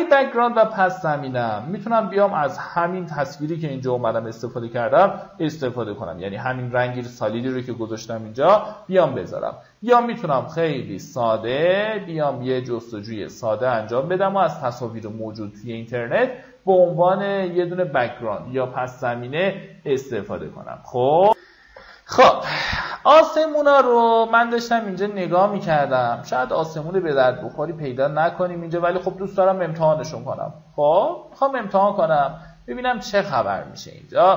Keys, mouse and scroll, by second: 8.5 super+e, 11.5 click, 22.0 F9, 23.2 Tab, 24.6 click, 25.7 click, 33.7-34.2 alt+scroll down 1.